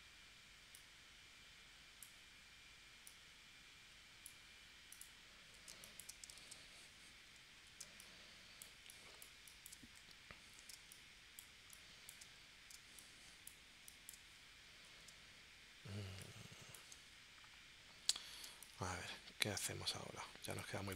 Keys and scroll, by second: 5.7 space, 7.8 space, 10.7 space, 12.7 space, 15.1 space, 16.2 space, 18.5 space.